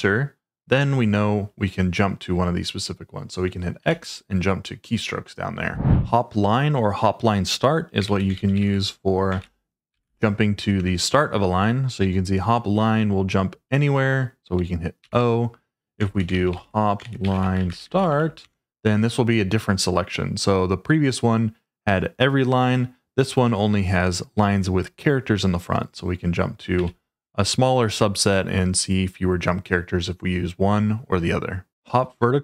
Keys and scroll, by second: 3.8 x, 7.8-10.5 typing, 10.7 Return, 15.0-19.2 typing, 26.7 f.